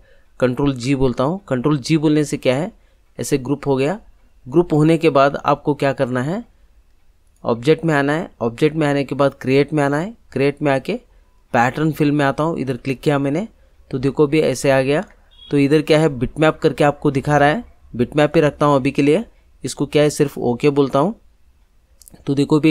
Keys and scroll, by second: 0.6 ctrl+g.